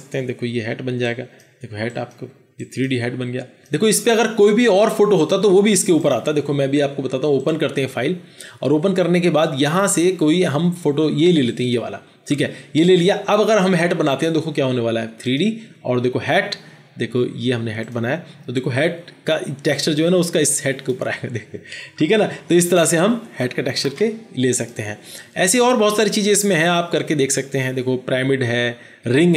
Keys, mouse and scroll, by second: 11.5 double click, 22.1 ctrl+z, 22.5 ctrl+z, 23.1 ctrl+z.